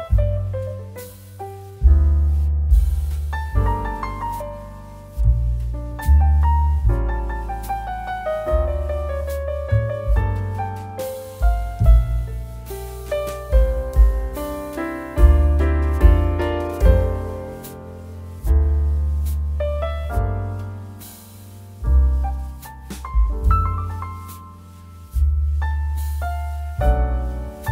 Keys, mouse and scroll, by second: 10.3 shift+a, 12.7 s, 14.2 click, 14.6 g, 15.9 click, 16.6 KP_7, 18.1 s, 19.2 click, 22.4 s, 23.9 click, 25.2 KP_7, 25.8 g.